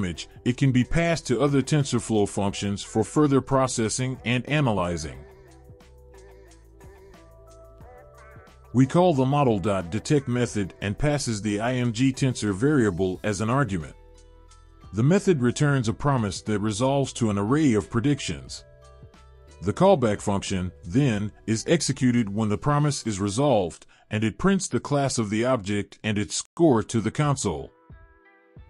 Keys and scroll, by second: 7.5 Return, 8.4 ctrl+v, 9.3 Return, 10.1 BackSpace, 10.3 BackSpace, 12.5 Return, 16.4 Return.